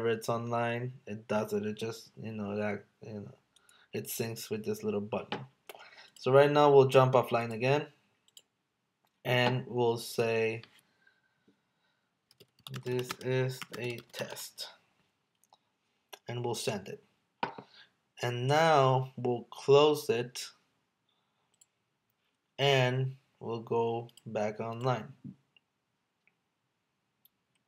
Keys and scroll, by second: 12.8 space, 13.1 space, 13.7 space.